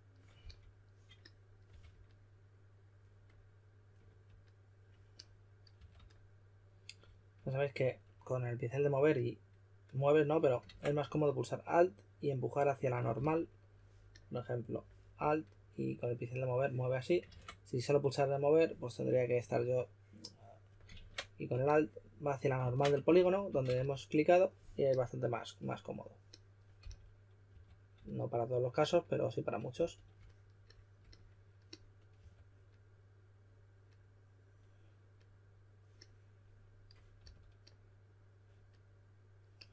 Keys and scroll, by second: 0.4 s, 1.4-2.1 typing, 5.7 2, 10.6 super+z, 13.1 s, 17.2 super+z, 20.9 super+z, 22.6 super+z, 22.9-24.2 typing, 26.7-27.5 typing, 29.7 s, 32.1 2, 36.9-37.7 typing.